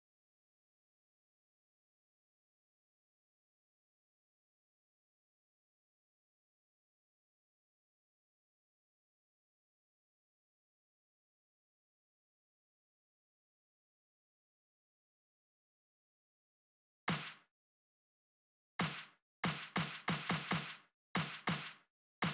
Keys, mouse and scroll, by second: 0.1 click, 1.1 click, 6.5-7.9 typing, 8.8 Home, 9.0-13.7 typing, 11.4 End, 14.7 d, 15.0 Return, 16.8 space, 17.7 click, 18.3 click, 19.0 click, 20.4 right click, 21.1 right click.